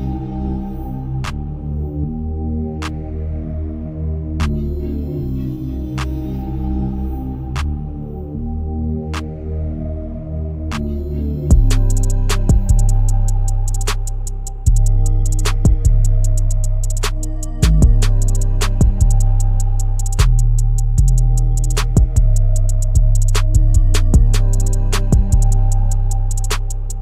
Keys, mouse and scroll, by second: 0.3 shift+middle click, 1.0-1.5 scroll down 1, 1.5 shift+middle click, 2.3 n, 2.7-3.0 scroll up 1, 3.0 shift+middle click, 3.3-6.1 scroll up 2, 6.1 e, 9.4 g, 11.6 e, 14.7 scroll up 1, 15.0-17.5 shift+middle drag, 17.5 e, 21.6 e, 26.0-26.4 scroll down 1, 26.4-27.0 shift+middle drag.